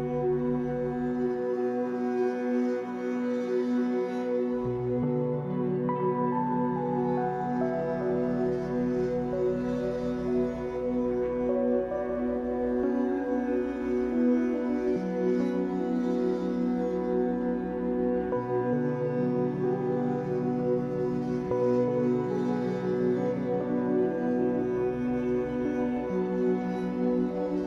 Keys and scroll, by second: 2.3 Escape.